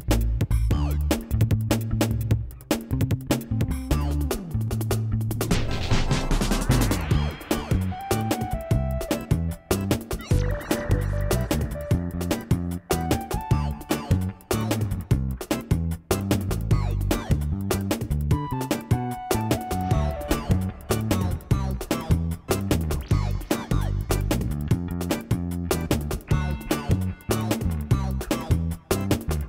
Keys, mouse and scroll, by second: 1.1 click, 1.7 click, 2.0 e, 2.6 click, 2.7 e, 4.2 e, 5.3 click, 5.4 e, 6.1 ctrl+z, 6.1 g, 8.6 ctrl+a, 8.6 g, 9.9 ctrl+shift+a, 10.5 g, 11.5 g, 12.3 ctrl+a, 12.8 g, 13.5 g, 15.0 g, 15.5 g, 16.1 click, 16.8 ctrl+g, 16.9 ctrl+a, 17.3 click, 18.4 g, 19.0 ctrl+a, 20.3 ctrl+a, 20.9 click, 21.1 g, 21.8 g, 22.3 click, 22.9 click, 23.6 click, 23.6 g, 24.4 shift+g, 25.1 ctrl+a, 25.5 click, 26.0 g, 27.1 g, 27.5 Tab, 28.0 a, 28.7 q.